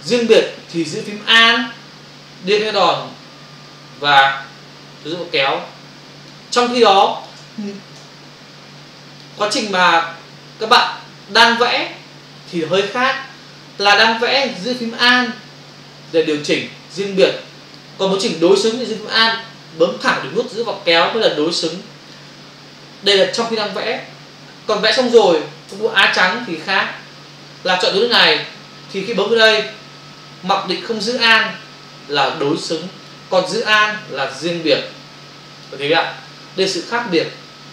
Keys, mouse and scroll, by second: 3.7 alt+click, 6.7 space, 8.0 p, 9.0 click, 9.9 click, 11.3 click, 12.6 click, 15.7 alt+click, 20.5 alt+click, 24.8 ctrl+click, 24.9 ctrl+click, 25.7 a, 26.6 click, 26.7 click, 27.6 click, 27.8 click, 28.3 click, 28.4 double click, 29.1 click, 29.3 click, 31.9 click, 34.6 alt+click.